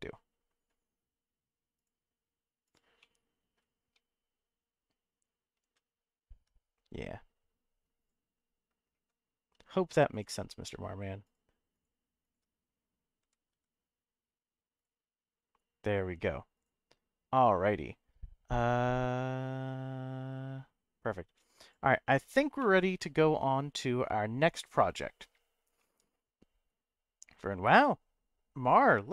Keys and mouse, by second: 1.7 click, 2.6 click, 3.0 middle click, 8.0 click, 9.4 3, 10.2 alt+click, 11.2 alt+shift+click, 11.8 alt+shift+click, 12.2 alt+shift+click, 13.2 g, 13.5 y, 14.8 click, 22.6-23.9 middle drag, 25.8 middle click.